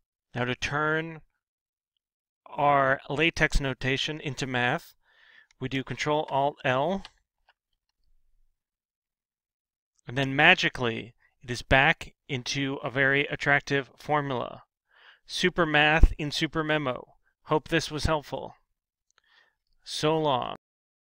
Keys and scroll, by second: 6.9 ctrl+alt+l.